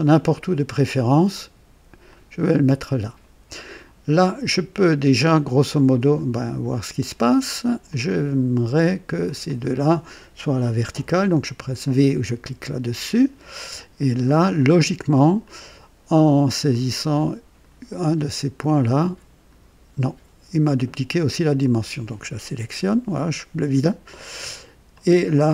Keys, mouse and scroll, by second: 2.0 click, 4.7-6.4 drag, 7.8 click, 9.4 click, 12.3 v, 14.5-15.8 drag, 16.7-17.8 drag, 18.7-19.7 drag, 21.6 click, 22.8 Delete, 24.9-25.5 drag.